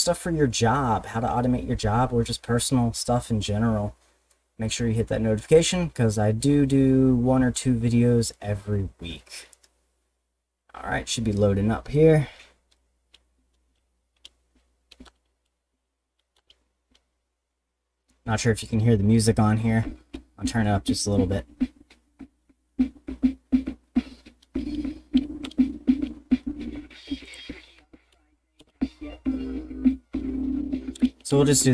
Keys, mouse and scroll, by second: 15.0 Return, 16.4 Return, 25.4 Return, 27.2 click, 28.6 Return.